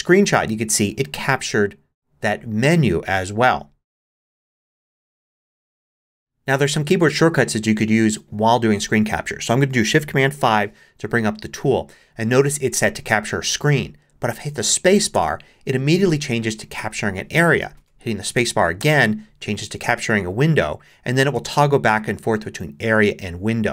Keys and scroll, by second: 10.3 shift+super+5, 15.1 space, 18.8 space, 21.3 space, 22.8 space.